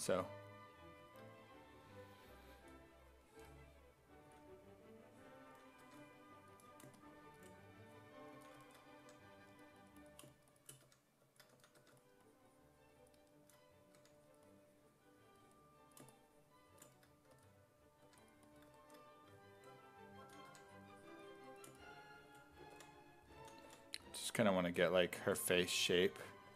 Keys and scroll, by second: 4.3 s, 5.5 s, 5.9 1, 8.4 s, 9.0 1, 10.9-12.3 typing, 14.0 1, 17.4 s, 18.1 1, 20.3 s, 20.5 1, 22.8 5, 23.4 s, 23.7 5, 25.8-26.5 typing.